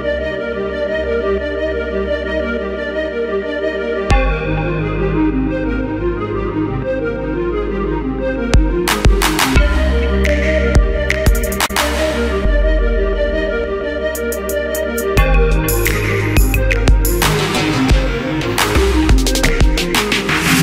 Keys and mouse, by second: 0.8 s, 2.2 Tab, 3.3 Tab, 3.6 Tab, 3.8 ctrl+z, 4.6 Tab, 5.6 g, 6.0 middle click, 7.1 middle click, 7.2 g, 7.7 middle click, 8.2 middle click, 8.4-11.5 typing, 8.8 middle click, 10.8 middle click, 11.3 middle click, 12.1-14.5 middle drag, 14.5 q, 18.6 g, 20.1 alt+s, 20.5 z.